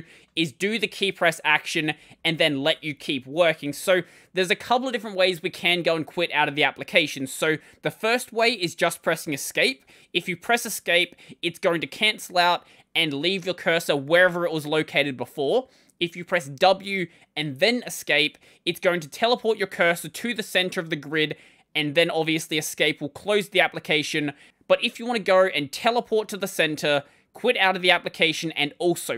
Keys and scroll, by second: 1.3-3.7 typing, 19.6 w.